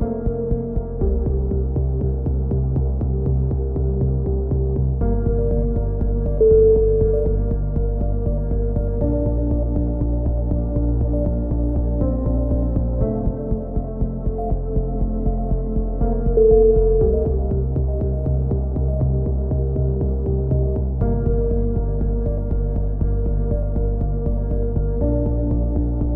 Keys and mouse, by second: 1.0-2.0 drag, 1.7 b, 4.9 z, 5.2-6.2 drag, 8.2 x, 9.7-10.8 drag, 13.0-14.9 drag, 15.3-17.2 drag, 15.8 Tab, 19.0 KP_1, 19.2-20.4 middle drag, 20.4 click, 21.4 middle click, 21.7 middle click, 22.8 KP_3, 23.6-24.6 drag, 24.6 middle click.